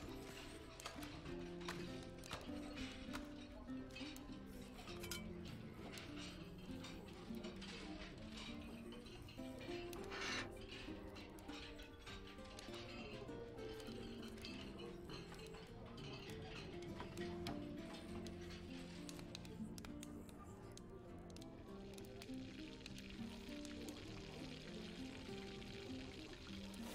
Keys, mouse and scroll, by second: 2.7 click, 5.1 s, 6.5-7.7 typing, 11.1 click, 13.8 click, 16.2 click, 23.2 click, 26.7-26.9 drag.